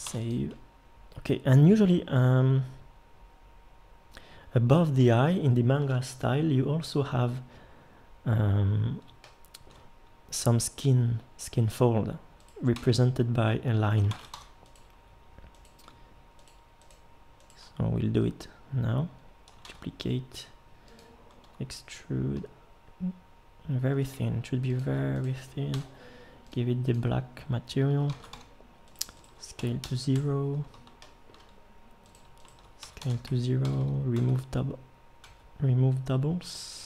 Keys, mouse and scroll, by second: 0.0 ctrl+s, 4.4-9.1 middle drag, 9.3-12.6 middle drag, 12.7 Tab, 14.1 ctrl+Tab, 19.6 shift+d, 21.4 e, 25.7 l, 28.1 ctrl+Tab, 29.6 s, 32.8 s, 33.7 a, 33.8 a, 34.1 w, 35.3 w.